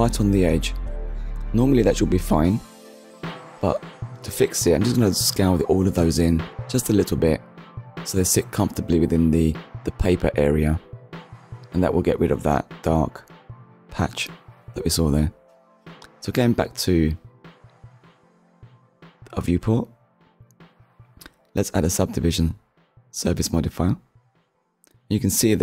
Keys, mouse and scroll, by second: 0.0-0.3 scroll up 1, 0.8-1.5 scroll down 2, 2.3 scroll down 1, 2.9-3.2 scroll down 1, 3.3 middle click, 6.2 a, 7.2 s, 11.0 shift+click, 12.1 Tab, 12.7-13.1 scroll up 1, 13.3 click, 13.6 middle click, 15.7 click, 17.9 middle click, 18.9 click, 19.6 click, 20.0 middle click, 21.2 click, 22.5 click, 24.3 click, 25.1 middle click.